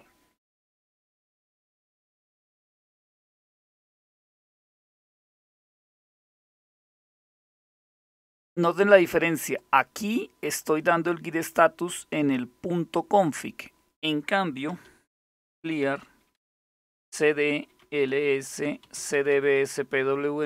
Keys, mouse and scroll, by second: 9.1 click, 11.5-12.6 drag, 14.6-20.4 typing, 16.7 Return.